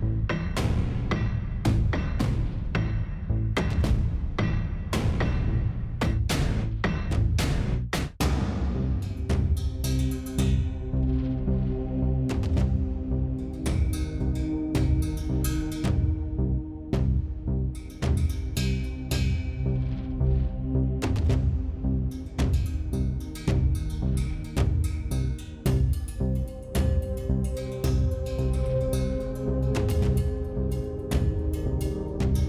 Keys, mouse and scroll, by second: 0.8 s, 3.5 s, 6.8 click, 9.6 scroll up 1, 9.8 middle click, 10.0 middle click, 12.5 middle click, 14.0 s, 15.0 s, 18.5-19.7 drag, 21.9 middle click, 22.2 click, 22.5 middle click, 22.6 click, 22.9 click, 23.9-25.7 typing, 24.6 click, 28.8 middle click, 29.5 middle click, 30.2 middle click, 31.9 click.